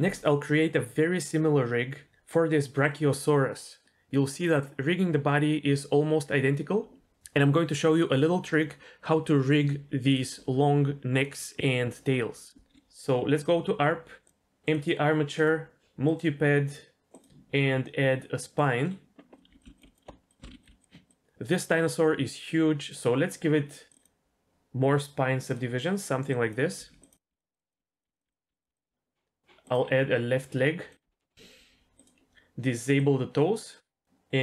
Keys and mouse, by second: 12.7 KP_3, 13.4 click, 14.2-14.8 drag, 15.3-16.1 drag, 17.2-18.6 drag, 19.3 click, 19.5 r, 19.6 s, 19.9 g, 20.1 s, 20.4 ctrl+z, 22.9-25.6 drag, 26.4 click, 26.7-28.9 typing, 27.0 click, 27.5 click, 28.4 click, 29.6-30.9 drag, 31.9-34.4 drag.